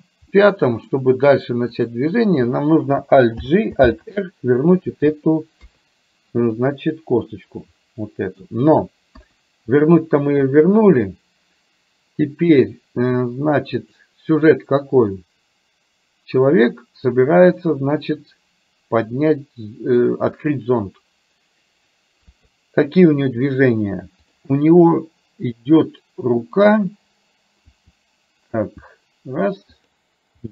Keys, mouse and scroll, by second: 0.4 middle click, 1.8 click, 3.4 alt+g, 3.9 alt+r, 5.6 KP_3, 7.3-8.4 middle drag, 9.1 KP_1, 13.9 click, 17.8-20.1 middle drag, 22.3 KP_3, 24.3 click, 27.8 r, 30.4 g.